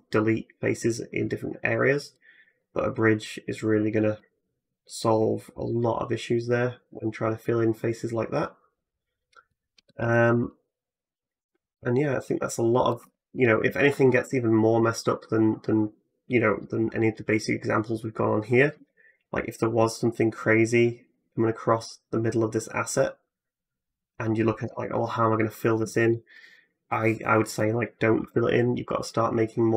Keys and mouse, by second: 12.8 Tab, 13.9 ctrl+r, 18.6 k, 28.0 k.